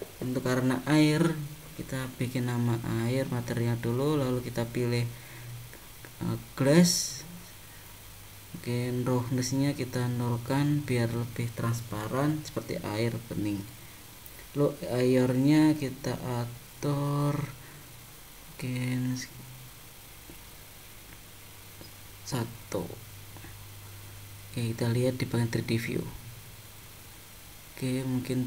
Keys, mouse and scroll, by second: 3.8 click, 9.1 click, 13.6 click, 22.2 click, 23.0 click, 24.9 click, 27.2 middle click.